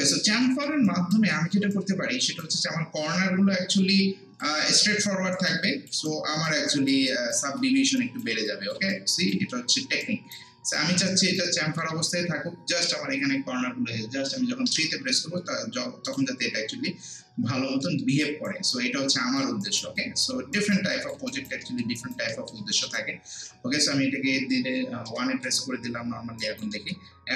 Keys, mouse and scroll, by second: 0.5 alt+middle click, 0.9 alt+right click, 1.3 alt+middle click, 1.7-3.5 alt+right drag, 3.5 scroll down 1, 4.4 alt+click, 4.9 alt+right click, 5.7 alt+click, 6.1 alt+right click, 6.7 alt+click, 7.1 alt+right click, 7.6 alt+middle click, 8.0 alt+right click, 8.9 alt+right click, 9.5 alt+middle click, 10.0 alt+right click, 11.6 alt+middle click, 14.7 3, 15.3 scroll down 1, 16.1 click, 16.4 scroll down 1, 16.7 scroll up 1, 17.6 scroll up 1, 17.8 alt+middle click, 18.2 alt+right click, 18.7 alt+click, 19.6 alt+right click, 20.0 alt+click, 20.6 alt+right click, 20.9 alt+click, 21.3 alt+right click, 21.7 alt+middle click, 22.0 alt+right click, 22.3 alt+middle click, 22.9 click, 23.9 scroll down 1, 24.1 scroll up 1, 25.1 1, 25.5 scroll down 1, 25.6 scroll up 1, 26.4 right click, 26.7 alt+middle click.